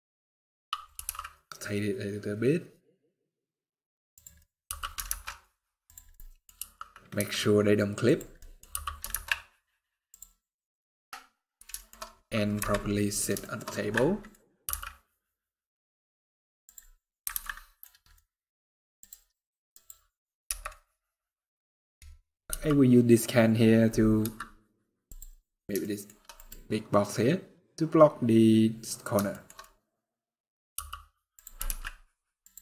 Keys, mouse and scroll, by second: 0.6 r, 4.1 middle click, 4.4 g, 5.8 middle click, 6.2 scroll down 1, 6.3 r, 8.1 middle click, 8.4 g, 10.4 middle click, 11.5 shift+middle click, 11.6 shift+scroll up 2, 12.3 KP_Decimal, 13.1 shift+middle click, 13.4 scroll up 2, 13.6 scroll down 1, 13.7 middle click, 14.1 scroll up 2, 14.4 g, 16.6-17.2 scroll down 7, 17.2 alt+a, 17.2 middle click, 17.5 scroll down 1, 17.8 middle click, 18.1 scroll down 2, 18.7 click, 19.4 click, 20.1 KP_0, 22.2 g, 24.8 click, 25.2-25.5 scroll down 3, 25.5 shift+middle click, 26.1 click, 27.1 scroll up 4, 29.0 shift+middle click, 29.3 middle click, 29.7 scroll down 2, 29.9 middle click, 30.5-31.2 scroll down 1, 30.5 g, 31.3 r, 32.4 middle click.